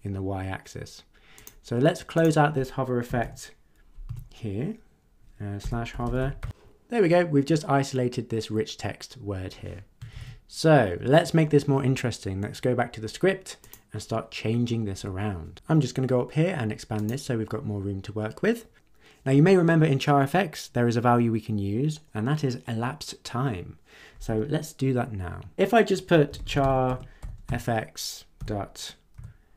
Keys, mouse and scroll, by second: 1.3 click, 2.1 click, 3.0 [, 3.2 ], 4.1 Left, 5.3-6.9 typing, 10.1 ctrl+s, 13.6 click, 16.9 click, 26.0-29.1 typing.